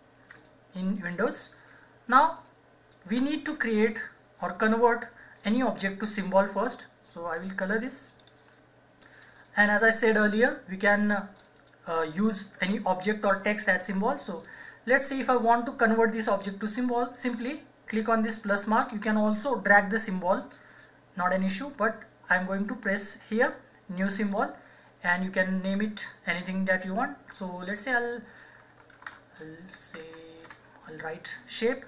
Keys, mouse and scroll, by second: 2.9 click, 8.2 click, 11.4 click, 24.3 click, 28.7-30.9 typing.